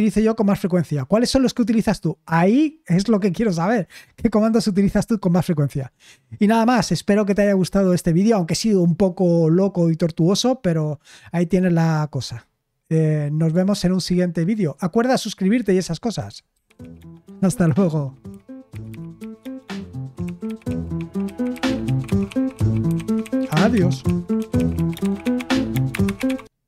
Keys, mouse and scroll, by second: 16.5 super+x.